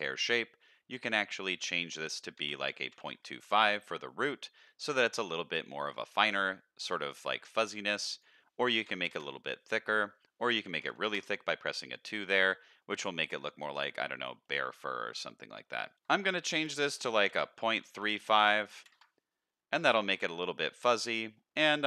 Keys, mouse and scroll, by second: 0.0-1.0 scroll down 2, 1.0-3.5 drag, 4.5 middle drag, 5.0 scroll up 1, 8.1-9.2 drag, 9.8-11.2 drag, 12.2 middle click, 12.7 scroll up 1, 14.4 middle click, 15.9-18.4 shift+drag, 16.4 shift+Left, 16.5 shift+Left, 18.1 shift+Left, 18.4 middle click, 19.7-20.2 middle drag, 21.2-21.8 scroll up 10.